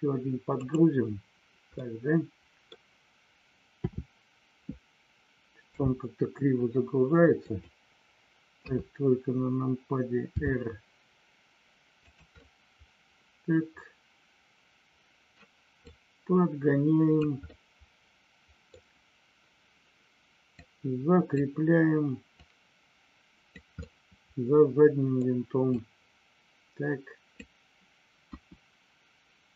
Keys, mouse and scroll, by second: 1.8 middle click, 3.9 KP_7, 5.6 r, 7.4 click, 8.6 KP_3, 10.3 r, 12.0 click, 12.3-15.3 middle drag, 15.3-16.0 scroll down 1, 16.0-17.2 drag, 17.4 scroll up 1, 17.5-18.8 middle drag, 20.6 click, 22.3-23.5 drag, 23.8-25.3 middle drag, 25.6-27.4 drag, 28.3 KP_1.